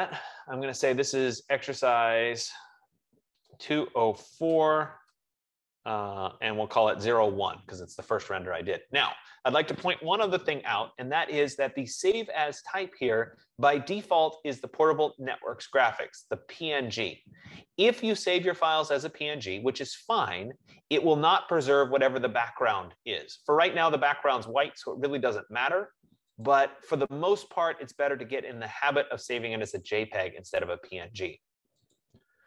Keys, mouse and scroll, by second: 0.2 click, 0.4 click, 1.5 click, 1.8-7.5 typing, 26.7-31.7 drag, 32.2-32.4 drag.